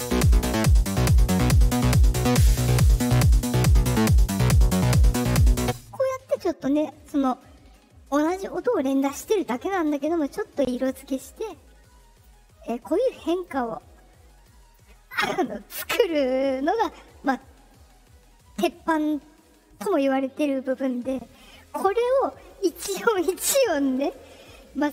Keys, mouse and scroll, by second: 5.6 space, 11.4 click, 13.1 click, 14.4 click.